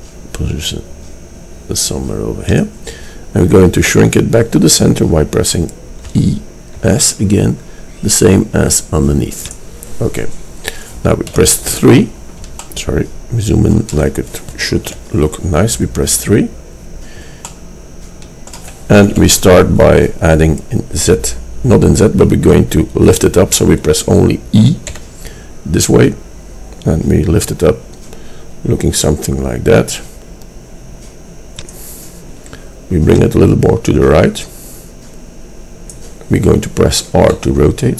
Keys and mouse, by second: 6.2 e, 11.3 KP_3, 14.9 KP_3, 19.2 KP_3, 25.0 e, 31.9-35.1 middle drag, 37.4 r.